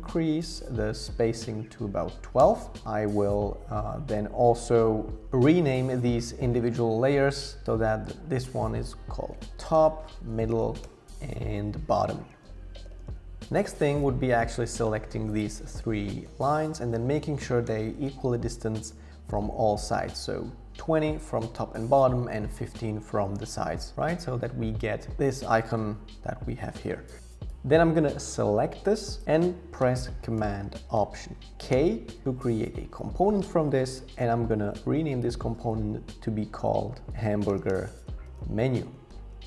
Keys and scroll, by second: 0.0 Up, 0.6 Down, 2.4 Return, 9.1-13.6 typing, 17.6 Down, 25.1 super+0, 31.7 alt+super+k, 34.8 super+r, 36.8-38.3 typing.